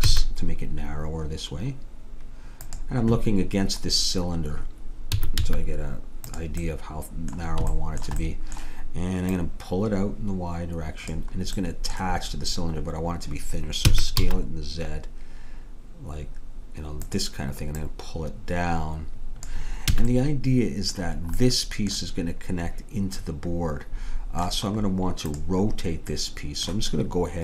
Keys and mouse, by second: 5.2 s, 6.7-9.4 middle drag, 9.4-11.7 drag, 11.7-13.4 middle drag, 13.9 s, 17.8-19.6 drag, 20.0 a, 21.9-23.4 middle drag, 25.4-27.4 drag.